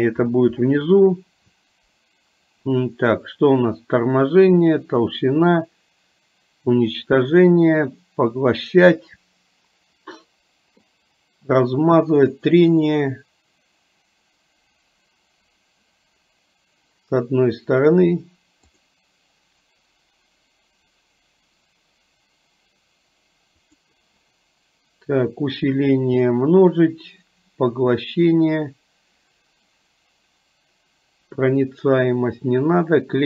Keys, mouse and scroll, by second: 18.9 click.